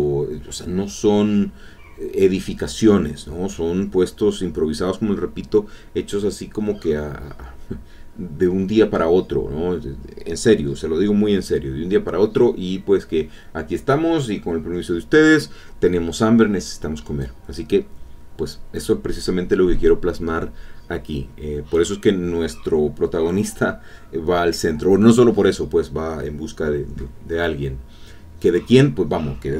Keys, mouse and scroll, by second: 0.4-1.5 drag, 3.8 click, 5.3 click, 6.7 click, 7.2 click, 7.8 click, 9.6-11.2 drag, 11.3 click, 16.5 middle click, 20.2 middle click, 22.9 alt+Tab, 26.1-28.1 drag.